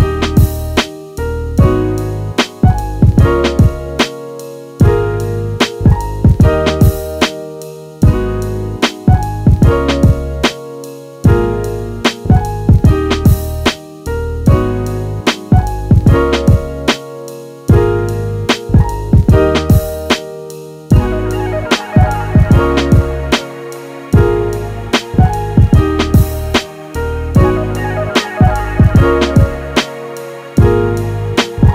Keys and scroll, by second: 1.0 space, 6.0 t, 9.0 space.